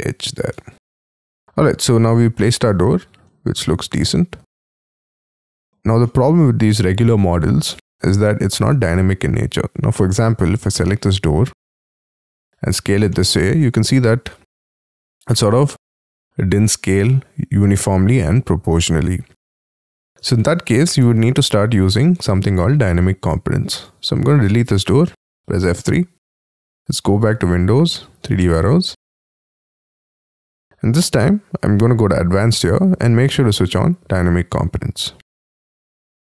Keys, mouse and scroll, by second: 0.6 space, 1.0-1.7 scroll down 13, 1.4 F3, 1.4 middle click, 2.4 middle click, 2.7 F2, 3.0 scroll up 7, 3.2 middle click, 9.7 scroll up 1, 9.9 middle click, 10.8 s, 13.1 middle click, 14.9 middle click, 18.9-19.5 scroll down 6, 19.5 middle click, 20.5 ctrl+z, 21.0 middle click, 22.1 space, 22.6-24.7 scroll up 5, 24.7 Delete, 25.5 F3, 31.0 scroll down 4, 32.5 scroll down 2.